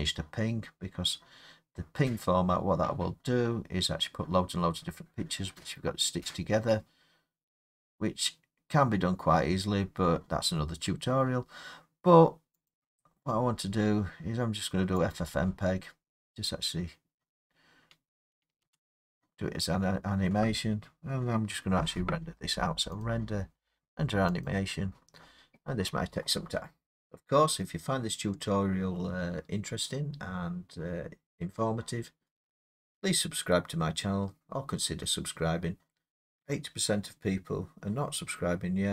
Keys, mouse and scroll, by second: 12.7 click, 15.1 click, 18.6 space, 23.0 click, 24.4 click.